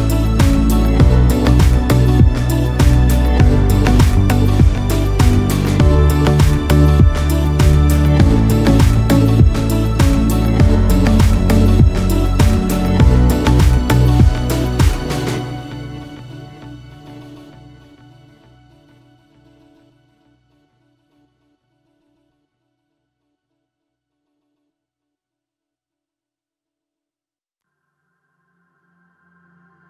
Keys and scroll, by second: 0.7 ctrl+space, 13.9 ctrl+shift+F7, 14.8 b.